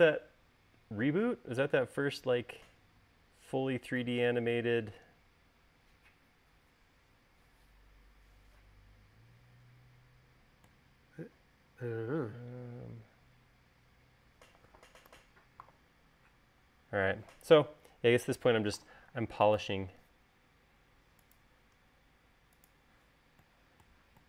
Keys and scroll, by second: 15.9 u, 20.0 space.